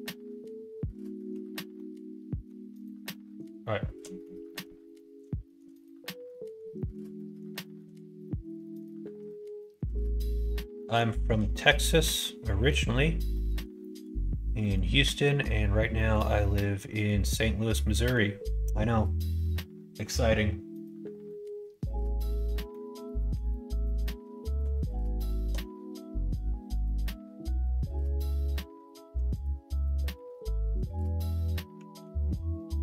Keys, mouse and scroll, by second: 1.7 middle click, 3.0 middle click, 4.0 middle click, 4.4 middle click, 4.9 middle click, 5.4 shift+middle click, 5.7 middle click, 6.0 middle click, 6.4 middle click, 6.7 middle click, 7.1 middle click, 7.5 shift+middle click, 8.2 middle click, 8.6 middle click, 9.0 middle click, 9.5 shift+middle click, 9.9 middle click, 10.3 middle click, 10.7 middle click, 11.1 shift+middle click, 11.5 middle click, 11.9 middle click, 13.3 middle click, 13.7 shift+middle click, 14.5 middle click, 15.2 middle click, 15.9 middle click, 16.3 middle click, 16.8 middle click, 17.3 middle click, 22.6 middle click, 23.1 middle click, 23.4 middle click, 23.8 middle click, 24.3 shift+middle click, 24.7 middle click, 25.2 shift+middle click, 29.3 click, 29.9 middle click, 30.7 click, 31.9 ctrl+s.